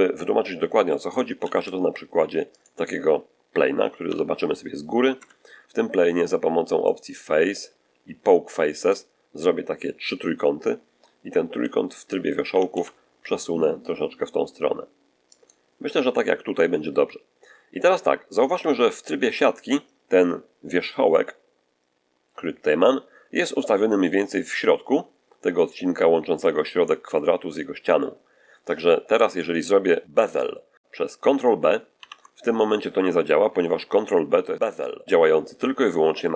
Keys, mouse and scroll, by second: 0.4 scroll down 1, 0.7-1.2 shift+middle drag, 1.3 shift+a, 2.4 click, 3.9 7, 5.0 Tab, 6.7 click, 8.6 click, 11.4 1, 11.8 right click, 12.4 g, 12.6 x, 15.2 ctrl+click, 17.7-18.1 scroll up 2, 18.4 z, 31.8 ctrl+b.